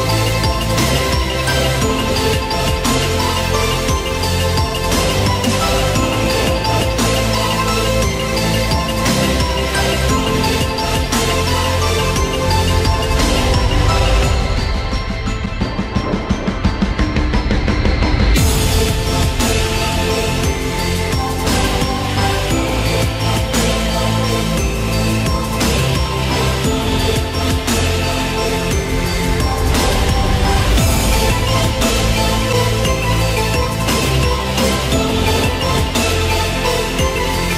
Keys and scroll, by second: 2.6 Delete, 3.3 Escape, 4.1 Delete, 6.0 ctrl+alt+z.